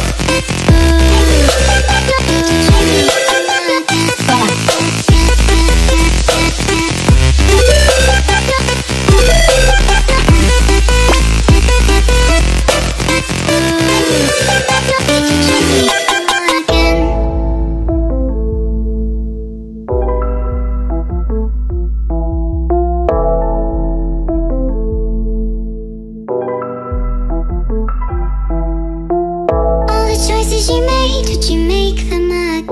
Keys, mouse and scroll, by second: 0.0-2.2 typing, 2.8 Tab, 3.4-4.1 typing, 4.7 ctrl+space, 5.0 click, 5.2 click, 6.0 ctrl+click, 6.2 click, 6.8 click, 8.0 click, 8.9 click, 9.8 click, 11.3 click, 14.6 click, 17.4 click, 20.9 click, 21.8 click, 22.5-23.8 typing, 22.8 Tab, 22.9 Tab, 25.4-30.7 click, 25.9-27.7 typing, 26.2 Tab, 26.9 Tab, 28.7 ctrl+space, 28.9 ctrl+click, 32.5 click.